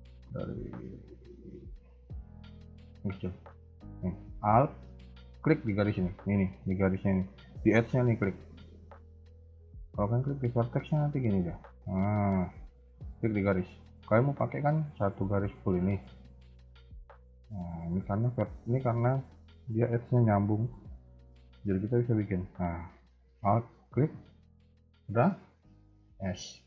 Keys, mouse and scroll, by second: 0.0 ctrl+z, 0.7 ctrl+z, 1.2 ctrl+z, 1.9 ctrl+z, 2.2 ctrl+z, 3.2 ctrl+z, 3.2 a, 3.3 a, 3.7 scroll up 2, 5.2 alt+click, 5.7-6.2 scroll up 2, 6.1 a, 6.2 a, 10.2 alt+click, 11.7-12.4 scroll down 4, 12.1-12.6 scroll up 4, 12.5 a, 12.7 a, 13.5 alt+click, 15.3 scroll down 2, 15.5 middle click, 18.4 KP_1, 20.7 KP_3, 20.7 a, 20.8 a, 21.5 alt+click, 22.6 a, 22.8 a, 23.5 alt+click, 24.7-25.0 scroll down 2, 25.0 shift+middle click, 25.4-25.8 scroll up 1, 26.1 s.